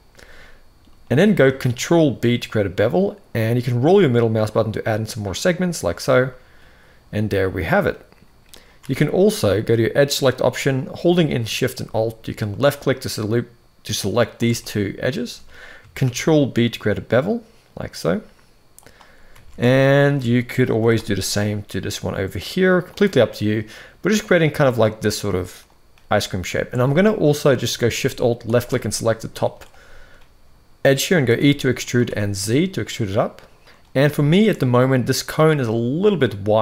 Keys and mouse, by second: 0.5 middle click, 1.3 ctrl+b, 6.0-7.5 middle drag, 8.6 alt+a, 13.9 alt+shift+click, 14.3 middle click, 15.8 ctrl+b, 19.2 alt+a, 20.5 g, 22.9-25.2 middle drag, 26.5 alt+a, 26.8 middle click, 28.2 alt+shift+click, 28.6 middle click, 31.0 e, 33.9 shift+middle click.